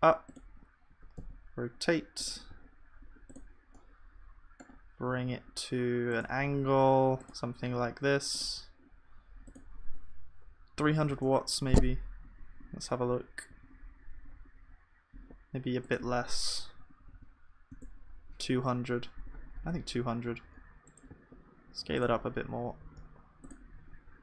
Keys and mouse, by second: 2.5 g, 14.5 click.